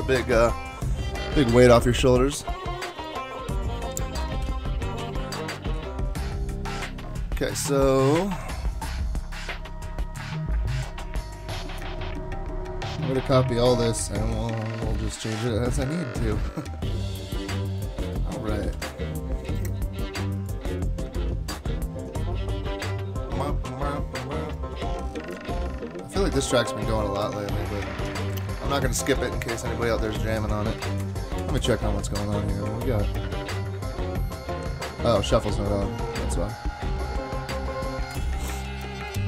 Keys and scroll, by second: 4.3 super+s, 7.7 super+Tab, 18.6 super+c, 21.1 super+Tab, 27.2 super+Tab, 28.8 super+Tab, 30.1 super+Tab, 30.4 super+Tab, 30.8 super+Tab, 38.1 super+Tab.